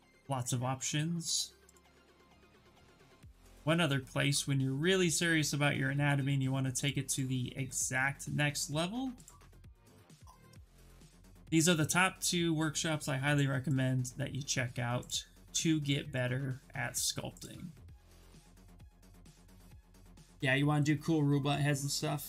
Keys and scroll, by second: 9.7 ctrl+v, 10.1 Return.